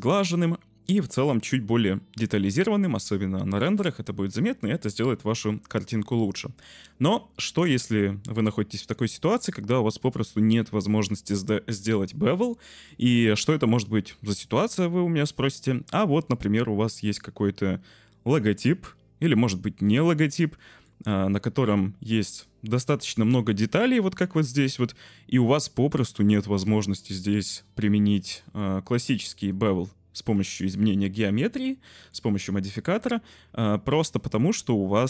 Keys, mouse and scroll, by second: 12.8 z, 13.7-15.3 drag, 17.7-20.8 drag, 22.2 click, 22.7 Tab, 23.2 middle click, 24.0 shift+middle click, 24.6 middle click, 26.0-27.3 middle drag, 28.2 shift+middle click, 29.1 shift+middle click, 30.3 Tab, 31.9 shift+middle click, 33.3-35.0 middle drag.